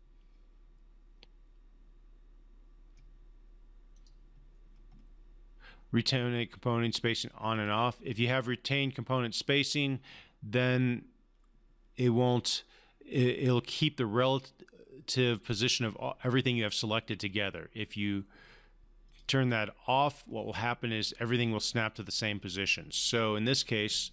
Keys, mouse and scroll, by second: 3.9 click, 7.5 click, 19.1 click.